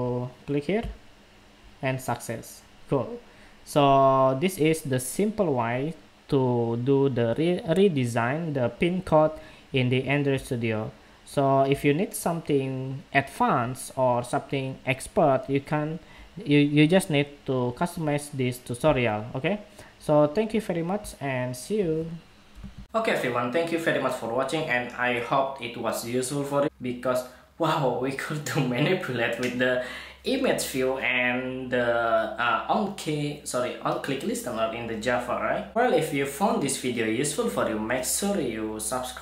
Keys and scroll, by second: 22.5 shift+super+2.